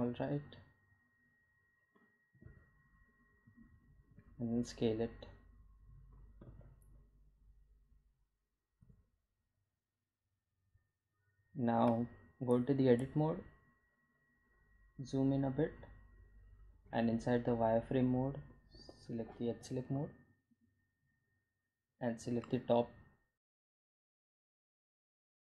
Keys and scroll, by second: 4.0 s, 6.6 g, 6.7 z, 9.2 s, 13.3 Tab, 20.2 1.